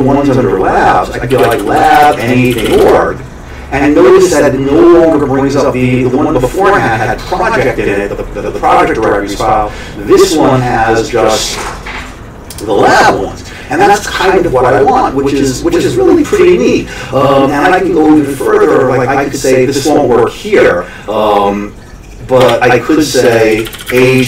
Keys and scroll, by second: 1.1-3.2 typing, 22.4-24.2 typing, 23.3 Escape.